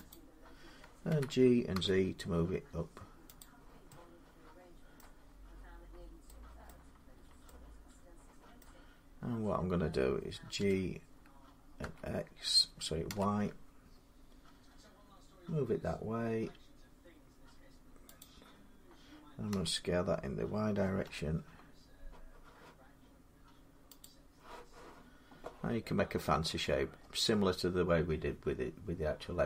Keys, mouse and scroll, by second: 0.9-1.9 typing, 3.2 click, 3.9 z, 4.7 middle click, 5.0-5.7 scroll down 7, 6.5 middle click, 6.5-7.2 scroll down 5, 7.9 scroll, 8.4-11.6 middle click, 8.7-10.3 scroll down 3, 10.4 g, 11.6 x, 12.8 y, 18.0-23.0 drag, 19.3 s, 20.8 y, 23.8 click, 25.7 scroll up 3, 26.7-28.8 scroll down 1, 28.8 scroll down 1.